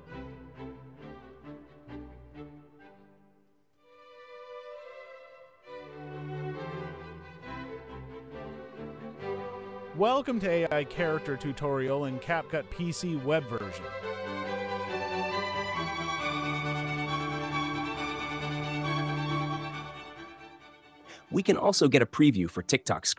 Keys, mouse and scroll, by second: 4.1 click, 9.2 space, 14.6 space, 16.8 click.